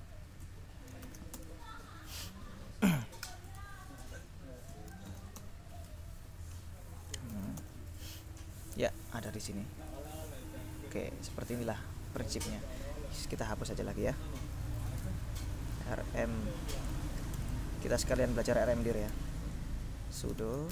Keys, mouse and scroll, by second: 0.0-0.1 typing, 1.2 shift+8, 1.4 shift+Return, 3.1 Up, 3.6 BackSpace, 4.4 BackSpace, 5.2 shift+8, 5.4 Return, 7.2-8.1 typing, 9.9 click, 14.4-17.4 typing, 19.2 ctrl+l, 20.0-20.7 typing.